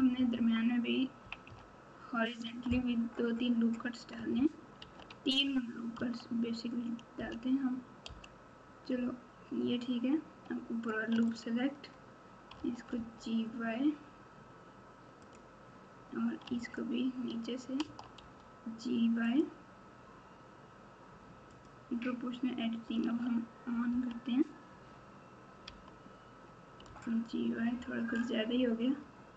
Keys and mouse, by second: 0.0-1.4 typing, 2.4 Tab, 4.8 ctrl+r, 11.2 alt+click, 12.5 g, 16.5 alt+click, 17.8 g, 21.5 click, 23.9 o, 25.6 g.